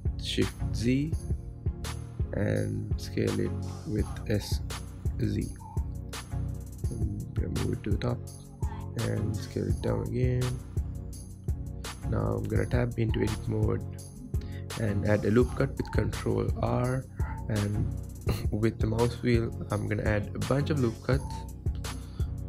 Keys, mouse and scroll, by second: 0.4 s, 3.9 s, 6.1-7.1 scroll up 2, 7.1 g, 8.9-9.6 scroll down 2, 9.6 s, 12.9-13.3 scroll up 5, 13.3-15.2 scroll down 3, 15.2 Tab, 16.4 ctrl+r, 19.5 ctrl+z, 20.4 ctrl+r.